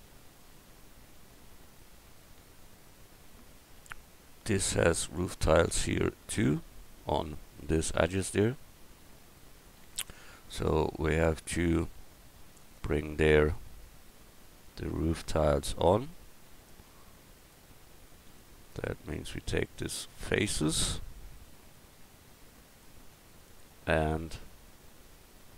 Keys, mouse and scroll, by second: 9.6 Tab, 10.1 Tab, 10.6 Tab, 17.4-22.1 middle drag, 23.1 middle click.